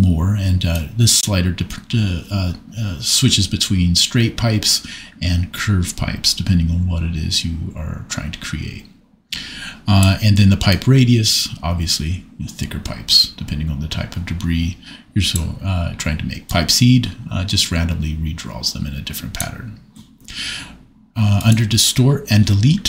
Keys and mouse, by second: 0.7-3.6 drag, 6.3-9.2 drag, 9.2 middle click, 10.8 click, 13.7-15.3 drag, 16.4-19.4 drag, 21.4 click.